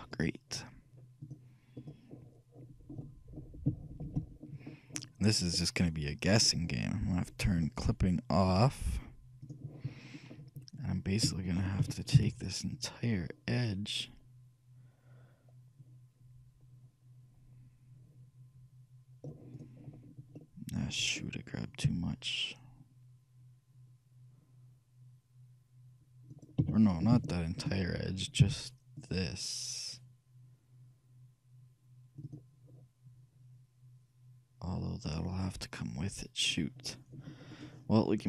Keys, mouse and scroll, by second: 0.2-2.0 right drag, 1.3-3.0 drag, 3.1-7.4 middle drag, 8.6-11.2 drag, 10.3-12.1 middle drag, 11.9 shift+a, 12.3 c, 20.6-22.2 middle drag, 21.9 c, 22.2-23.2 scroll up 1, 26.6-28.4 right drag, 26.8 a, 27.0-30.0 shift+middle drag, 27.4 click, 28.6 c.